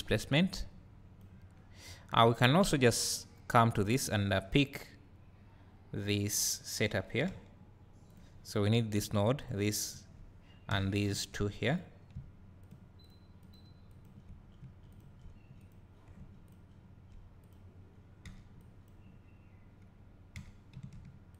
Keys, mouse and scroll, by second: 0.5-3.2 drag, 8.5 click, 9.4 shift+click, 12.6 shift+click, 13.0 shift+click, 13.9 shift+click, 14.9 shift+click, 15.6 click, 16.5 shift+click, 17.4 click.